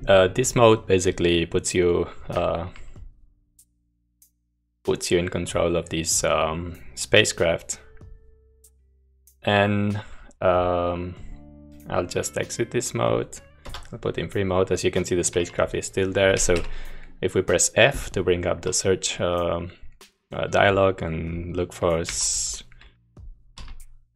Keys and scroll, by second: 2.9-10.2 typing, 13.7 0, 16.7 f, 22.0-24.1 typing.